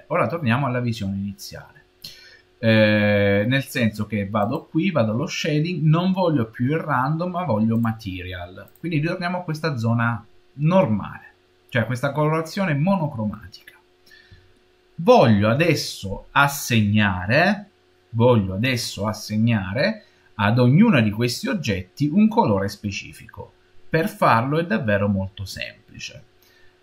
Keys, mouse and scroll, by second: 4.3-7.3 drag, 8.5 click, 9.8-10.9 middle drag, 11.5 middle click, 12.2 middle click, 14.4-24.6 shift+middle drag, 24.6-26.8 scroll up 5.